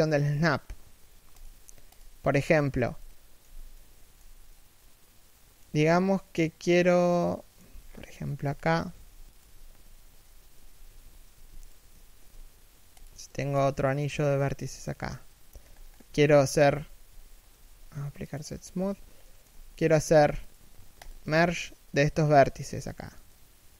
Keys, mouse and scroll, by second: 1.7 z, 2.4 middle click, 3.1 z, 3.4 middle click, 3.9 z, 4.2 middle click, 5.3 z, 5.6 middle click, 7.4 z, 7.5-7.9 scroll down 1, 7.9 middle click, 8.1 z, 8.2-8.6 scroll up 1, 8.6 z, 9.0 right click, 10.2 3, 10.5 1, 11.0 a, 11.3 alt+right click, 11.8 shift+d, 12.9 e, 14.6 middle click, 15.3 z, 15.4-15.7 scroll up 1, 15.7 z, 16.0 middle click, 16.4 z, 16.8 a, 18.9 middle click, 20.1 right click, 20.7 shift+right click, 23.6 f.